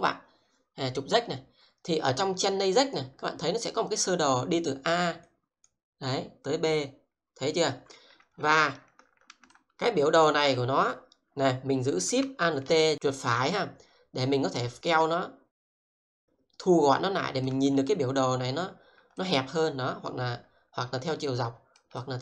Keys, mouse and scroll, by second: 6.0 double click, 9.5-10.8 alt+shift+right drag, 13.0 alt+shift+right click, 15.6 alt+shift+right click, 16.4 shift+right click, 19.2 alt+shift+right click.